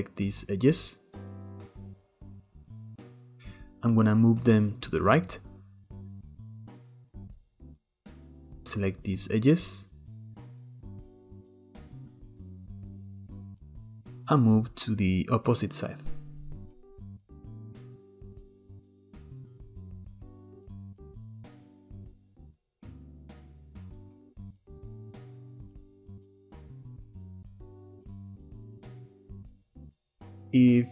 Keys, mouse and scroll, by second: 0.2 shift+drag, 0.7 shift+click, 1.1 shift+click, 1.4 shift+drag, 1.8 shift+click, 2.0 shift+click, 2.2 shift+drag, 2.5 shift+click, 2.8 shift+click, 3.0 shift+click, 3.2 shift+middle click, 4.2 click, 7.7 click, 8.2 shift+click, 9.3 click, 10.0 shift+click, 10.6 shift+drag, 10.9 shift+drag, 11.3 shift+drag, 11.5 shift+drag, 11.8 shift+drag, 12.1 shift+drag, 12.4 shift+drag, 12.7 shift+drag, 13.2 shift+click, 13.4 shift+click, 14.0 click, 16.4 Tab, 17.2-17.6 scroll down 2, 17.6 scroll up 1, 17.8-18.4 middle drag, 18.4 click, 18.7 middle click, 19.0 scroll down 1, 19.3 click, 20.2 middle click, 20.6 click, 21.5 middle click, 21.9 drag, 22.1 scroll down 2, 22.2-24.1 middle drag, 24.1-24.5 scroll up 1, 25.9 click, 26.5 click, 27.0-27.4 middle drag, 27.4-28.5 scroll up 1, 28.5 shift+middle click, 28.9-29.5 scroll down 2, 29.5 click.